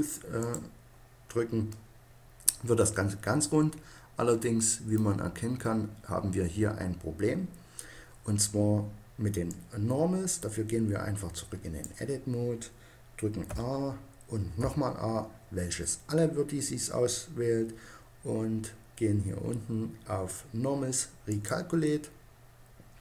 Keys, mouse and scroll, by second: 0.1-1.9 drag, 1.9-3.2 middle drag, 11.2 click, 13.3 a, 14.3 a, 21.1-22.7 drag.